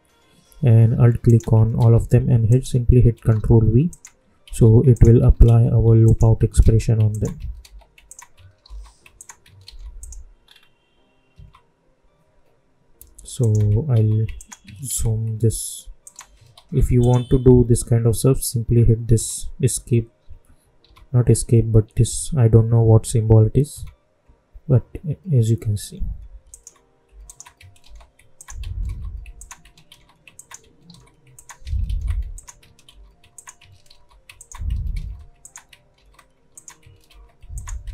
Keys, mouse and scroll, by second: 1.2 alt+click, 1.7 ctrl+v, 2.4 alt+click, 3.1 ctrl+v, 3.8 alt+click, 4.4 ctrl+v, 4.9 alt+click, 5.4 ctrl+v, 6.0 alt+click, 6.6 ctrl+v, 7.0 alt+click, 7.5 ctrl+v, 8.0 alt+click, 8.6 ctrl+v, 9.1 alt+click, 9.6 ctrl+v, 9.9 click, 10.3 scroll up 1, 11.3 `, 13.3 alt+click, 13.9 ctrl+v, 14.3 alt+click, 14.8 ctrl+v, 16.0 alt+click, 16.5 ctrl+v, 16.9 click, 18.6 `, 23.7 `, 26.4 alt+click, 27.2 alt+click, 27.8 ctrl+v, 28.3 alt+click, 28.8 ctrl+v, 29.3 alt+click, 29.8 v, 30.3 alt+click, 30.8 ctrl+v, 31.3 alt+click, 31.8 ctrl+v, 32.3 alt+click, 32.8 ctrl+v, 33.3 alt+click, 33.8 ctrl+v, 34.3 alt+click, 34.9 ctrl+v, 35.4 alt+click, 35.9 ctrl+v, 36.5 alt+click, 37.0 ctrl+v, 37.5 alt+click.